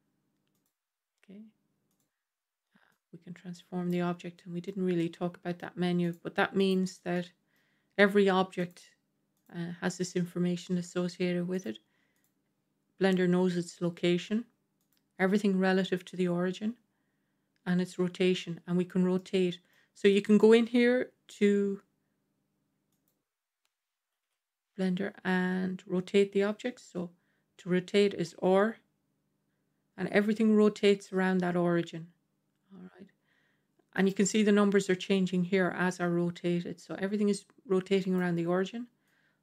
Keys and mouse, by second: 1.8 click, 2.8-3.8 drag, 4.2-4.6 middle drag, 4.9-5.5 middle drag, 5.9 click, 6.5 click, 7.0-7.4 middle drag, 8.5 click, 11.4 click, 12.0 click, 14.7 click, 19.0-19.6 middle drag, 20.0 middle click, 21.2 g, 24.1 KP_7, 28.2 r, 35.4 r, 38.9-39.4 drag.